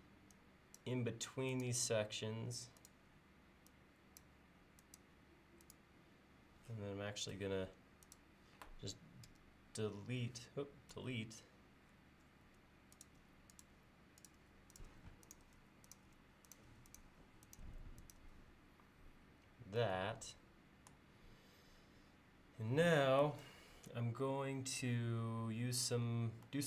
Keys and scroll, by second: 7.4 space, 9.3 e, 11.0 Delete, 12.5 space.